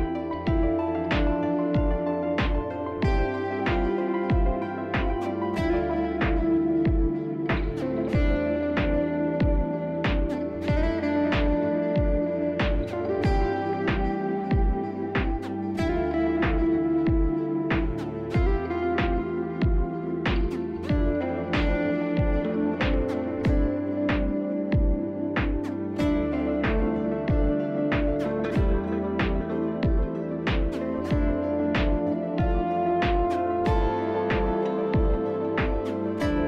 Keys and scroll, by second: 3.0 Delete, 5.5 r, 5.9 t, 6.5 shift+r, 10.6 s, 14.3 s, 16.6 c, 19.6 s, 21.4 s, 22.2 alt+x, 23.0 F4, 34.3 4.